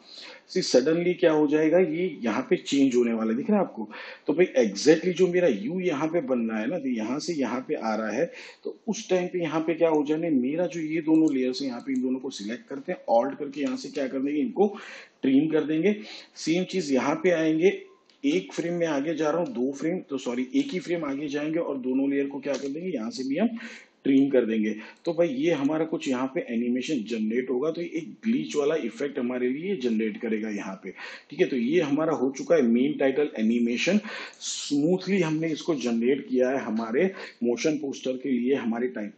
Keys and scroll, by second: 14.9 alt+], 19.5 ctrl+Right, 21.5 ctrl+Left, 24.1 alt+[.